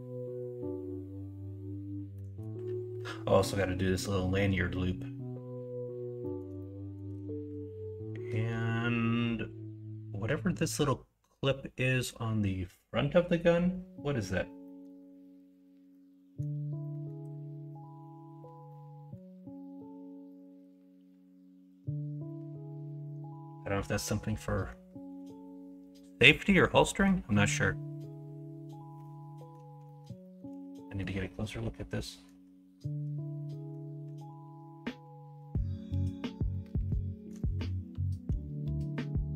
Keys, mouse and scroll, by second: 2.1 middle drag, 6.2 middle drag, 6.5 shift+middle click, 24.3-24.6 middle drag, 26.8 middle click, 27.5-29.5 middle drag, 29.8 middle click, 30.2 shift+middle click, 30.8 middle click.